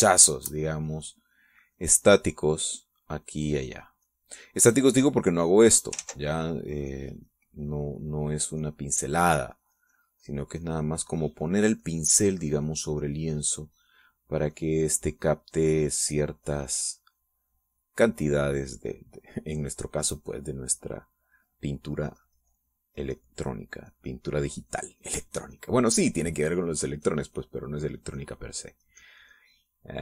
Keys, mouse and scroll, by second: 1.6-2.9 ctrl+drag, 3.0-5.4 ctrl+drag, 6.2 click, 6.9 ctrl+z, 7.8-9.2 drag, 9.3-11.1 drag, 11.1-14.2 drag, 14.2 click, 15.4-27.5 drag, 27.5-29.7 drag, 29.8-30.0 drag.